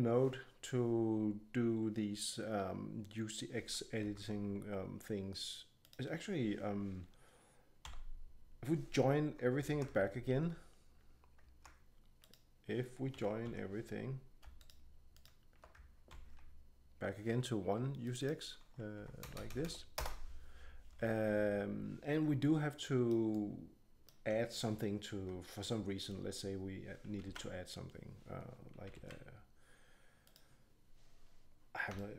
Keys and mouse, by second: 4.0 Tab, 7.8 a, 9.7 ctrl+j, 12.2 right click, 13.1 a, 13.4 right click, 13.4 a, 16.1 ctrl+j, 19.3 BackSpace, 19.5 BackSpace, 23.0 drag, 23.3 middle click, 23.5 middle click, 23.9 middle click, 24.3 click, 25.1 Tab, 27.2 shift+a, 28.9 shift+a, 31.9-32.1 drag.